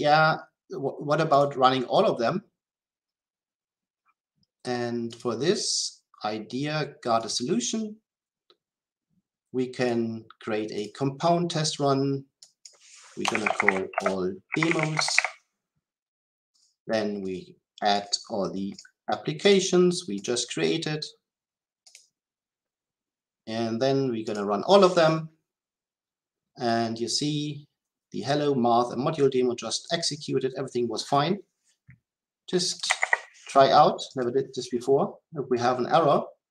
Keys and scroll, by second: 24.3 shift+F10, 34.1 shift+F10.